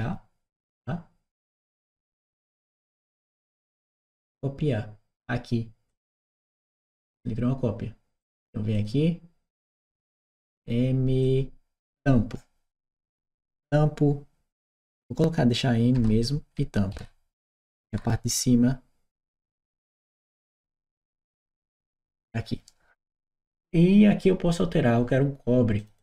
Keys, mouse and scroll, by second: 1.7-3.2 drag, 5.7 click, 7.0 click, 8.0 click, 8.6 click, 9.8 click, 11.0 click, 15.8 BackSpace, 16.8 shift+m, 17.7 shift+t, 19.1 t, 19.4 m, 25.6 Return, 25.6 click, 25.8 click.